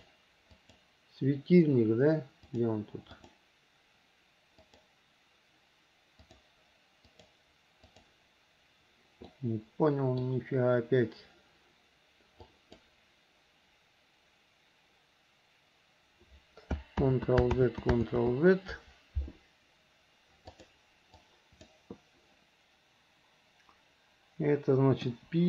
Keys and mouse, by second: 0.1 click, 0.8 click, 2.7 click, 3.3 click, 6.4 click, 7.3 click, 8.1 click, 9.5-10.5 middle drag, 12.7 click, 17.2 ctrl+z, 17.8 ctrl+z, 18.3 ctrl+z, 20.7 click, 21.4 click, 25.2 p.